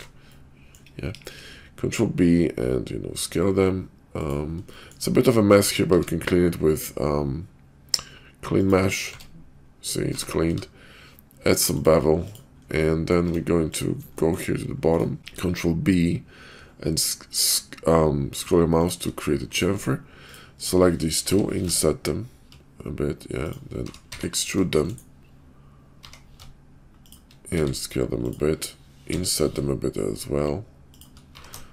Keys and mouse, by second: 0.2 click, 1.1 ctrl+b, 4.7 shift+click, 5.6 Tab, 5.9 q, 9.1 Tab, 10.0 Tab, 10.4 q, 12.8 middle click, 13.3 Tab, 14.1 shift+middle click, 14.9 shift+click, 15.2 ctrl+b, 23.7 r, 26.0 e, 27.5 s, 29.1 i, 31.3 e.